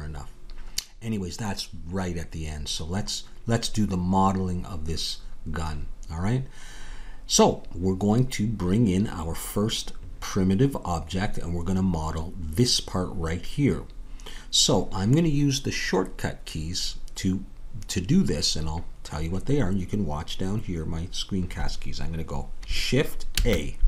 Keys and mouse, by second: 23.3 shift+a.